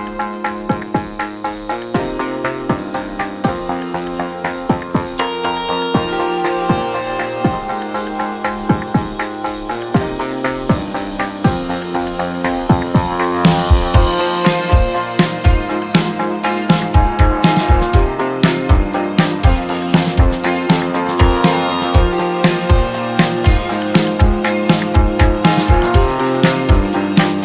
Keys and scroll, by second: 1.6 space, 2.3 v, 4.6 Delete, 5.9 w, 7.1 KP_3, 7.1 Return, 7.4 space, 9.5 space, 16.4 Escape, 24.0 space, 24.8 space, 25.0 space, 26.8 space.